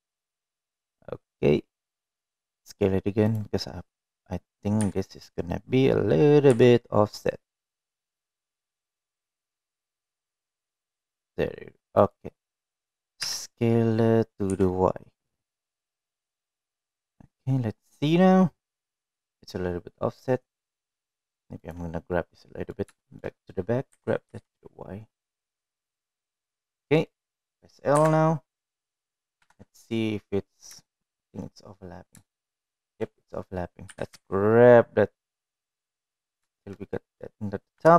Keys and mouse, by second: 6.0 g, 14.5 s, 18.5-22.0 middle drag, 22.9 click, 23.7 middle click, 24.3 shift+middle click, 25.3 g, 28.1 middle click, 29.3 l, 29.3 ;, 30.7 KP_1, 32.3 shift+middle click, 32.7 middle click, 33.7 shift+middle click, 35.2 g.